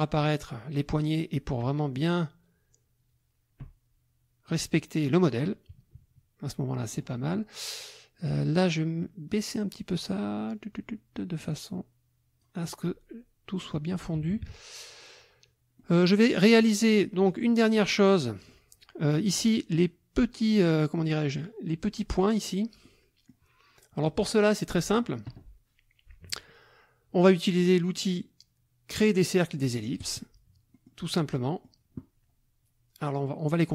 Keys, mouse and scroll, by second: 1.6-4.7 drag, 5.3 click, 6.0 KP_Subtract, 6.8 click, 8.2 click, 9.3-12.6 drag, 14.2 KP_Subtract, 15.8 click, 17.3 click, 18.1 click, 22.8 click, 30.0 click, 30.7 click, 31.1 click.